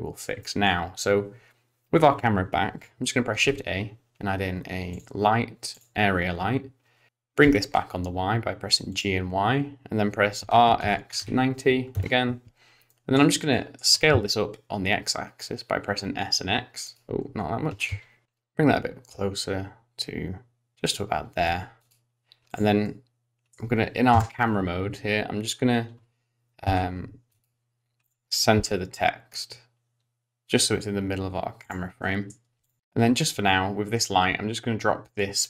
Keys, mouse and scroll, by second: 0.4 middle click, 3.4 shift+a, 7.4 g, 10.4 r, 12.9 middle click, 13.9 middle click, 13.9 s, 17.2-18.2 scroll down 5, 17.7 s, 18.2 middle click, 18.2-19.0 scroll up 3, 18.2 g, 21.3 g, 22.5 click, 22.8 middle click, 24.1 KP_0, 26.6 g, 28.0 click, 28.5 g, 32.0 middle click, 32.6 click, 32.8 middle click, 32.8-33.4 scroll down 2, 33.9 click.